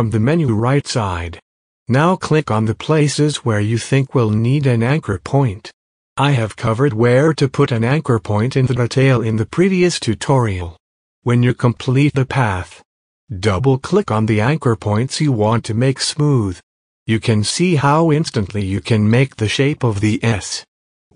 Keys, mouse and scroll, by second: 1.0 click, 2.6 click, 6.4 click, 8.2 click, 9.7 click, 12.0 click, 14.7 click.